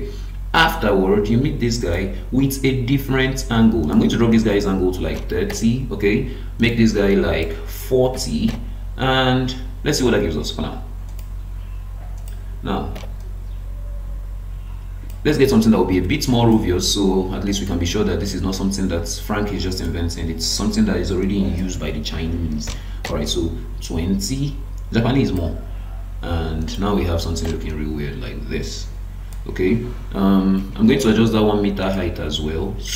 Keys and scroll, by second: 15.5 Escape, 30.6 Escape.